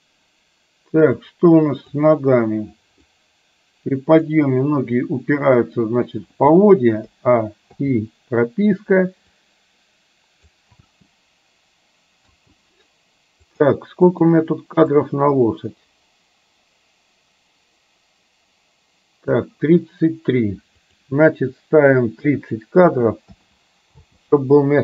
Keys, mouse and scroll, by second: 1.4 click, 3.3 click, 3.5 click, 7.2 a, 7.8 i, 9.4-10.7 drag, 10.9 space, 12.3 space, 13.5 click, 14.2 click, 15.0-19.5 drag, 21.0-23.4 drag, 24.0 space.